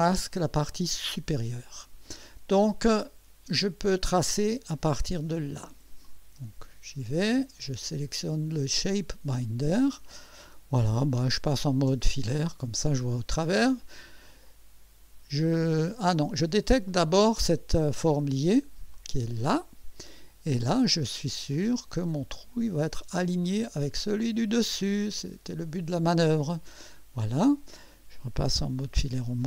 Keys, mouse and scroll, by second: 0.7 click, 1.1 space, 3.7 click, 6.0 click, 7.8 click, 8.9 click, 14.4 click, 16.9 click, 18.9 click, 21.5 click, 23.4 click, 25.0 click, 26.4 click.